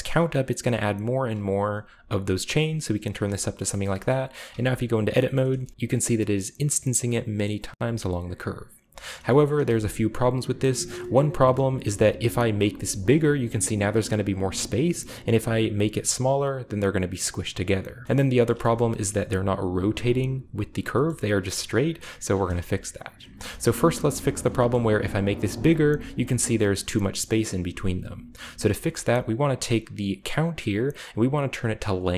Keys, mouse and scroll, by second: 3.4-3.8 shift+middle drag, 3.9 middle click, 5.0-5.3 scroll down 2, 5.1 shift+middle click, 5.3-5.7 shift+scroll up 2, 6.6-7.4 scroll up 2, 7.7 g, 8.3 right click, 8.9 shift+right click, 9.1 shift+middle click, 9.1-10.0 scroll down 1, 9.5 g, 10.3 right click, 10.4-12.0 scroll up 1, 10.9-12.2 shift+middle drag, 11.7 r, 12.0-13.2 scroll down 1, 12.2 right click, 12.5 g, 15.3-16.3 right drag, 15.6 g, 17.9 shift+right click, 18.0 shift+middle click, 18.0-19.0 shift+scroll up 2, 22.3-22.9 scroll down 2, 22.9 click, 23.3-24.5 scroll down 2, 23.4-25.0 shift+middle drag, 23.9 g, 24.3 shift+right click, 24.7 g, 27.3 middle click, 28.3-28.9 scroll up 1, 28.7-29.6 shift+middle drag, 29.4-30.1 drag, 30.2 click, 31.9 click.